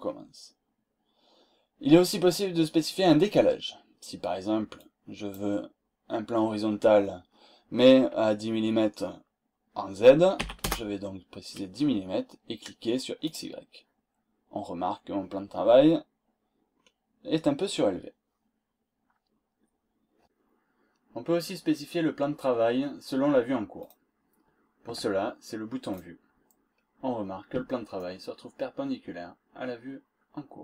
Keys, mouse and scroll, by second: 4.7 click, 10.1-11.0 typing, 13.2 click, 15.9-16.3 scroll up 2, 16.7-17.0 scroll down 2, 17.2 scroll up 2, 17.3-18.0 scroll down 4, 23.8 click, 25.9 click, 26.7 scroll down 2, 26.9 scroll up 2, 27.9-30.1 shift+right drag.